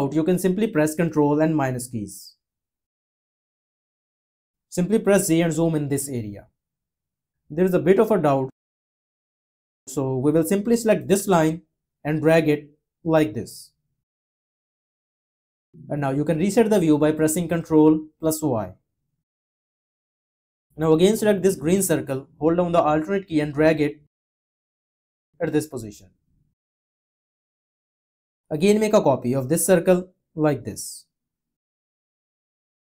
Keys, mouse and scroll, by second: 5.0 z, 17.5 y, 22.7 alt+click, 29.7 alt+click.